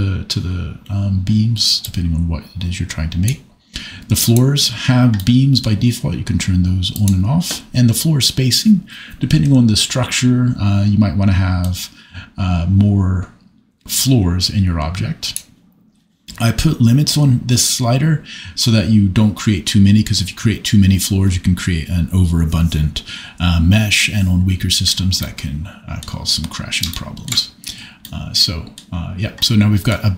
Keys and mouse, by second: 1.8-3.3 drag, 5.2 middle click, 7.0 click, 11.7-15.5 drag, 29.4 middle click.